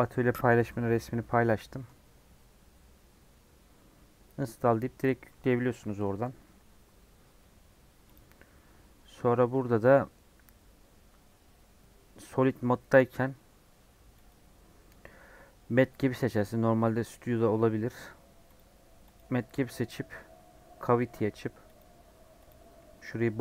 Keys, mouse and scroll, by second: 16.2-22.5 drag.